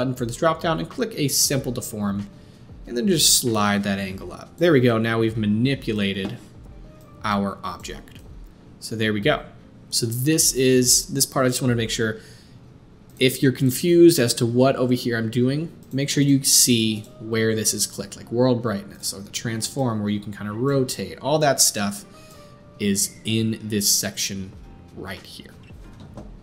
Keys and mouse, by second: 13.1-13.6 middle drag, 13.6 click, 13.7-17.0 middle drag, 17.0 click, 17.1-18.9 middle drag, 18.9 click, 19.1 middle click, 19.8-26.4 drag.